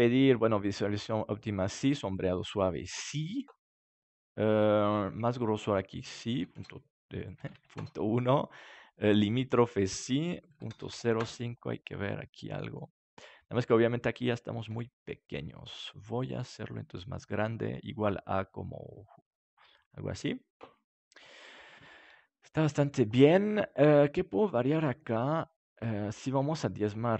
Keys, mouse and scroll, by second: 0.6-12.1 drag, 3.7-6.5 middle drag, 11.7-14.8 middle drag, 14.6 s, 19.4-21.2 drag, 21.2-26.1 middle drag, 26.7-27.1 drag.